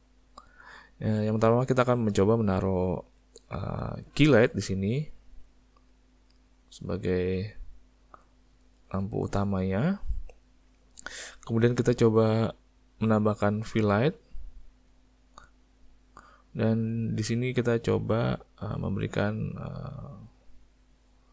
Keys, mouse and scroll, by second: 3.8 click, 4.9 click, 5.2 click, 5.6 click, 6.5 click, 8.2 click, 8.9 click, 9.8 click, 13.8 click, 14.1 click, 14.4 click, 14.7 click, 14.9 click, 15.3 click, 15.8 click, 17.8 click, 19.3 click, 19.6 click, 20.9 click.